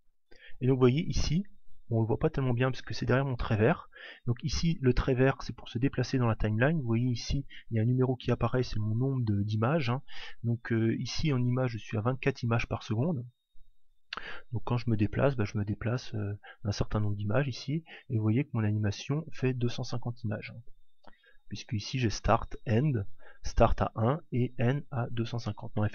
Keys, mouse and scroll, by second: 1.7-6.2 drag, 8.5 click, 14.3 click, 17.8 click.